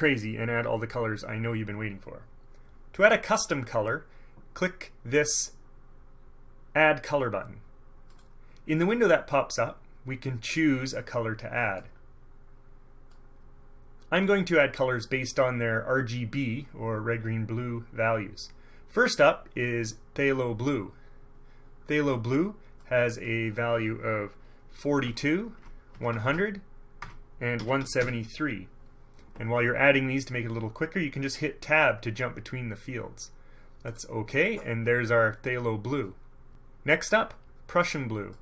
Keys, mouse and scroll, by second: 8.3 click, 11.9-13.4 drag, 20.4 click, 20.7-21.1 scroll down 1, 23.0 click, 25.1 KP_4, 25.2 KP_2, 25.7 Tab, 26.1 KP_1, 26.3 KP_0, 27.1 Tab, 27.7 KP_1, 27.9 KP_7, 28.1 KP_3, 34.0 click.